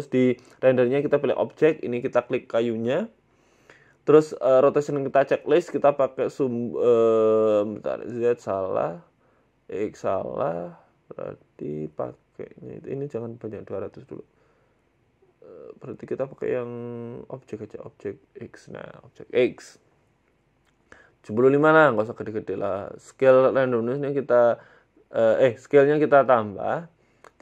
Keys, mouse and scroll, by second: 1.1 scroll down 2, 1.8 click, 3.4 middle click, 4.3 click, 4.7 click, 5.4 click, 6.9 click, 8.0 middle click, 8.8 click, 10.0 middle click, 10.4 scroll up 2, 10.9 middle click, 11.2 z, 12.7 click, 13.4 KP_0, 14.4 click, 16.1 click, 17.9 click, 19.3 middle click, 20.0-20.5 scroll down 1, 20.5 click, 22.3 scroll down 3, 22.9 shift+click, 25.4 click, 27.3 click.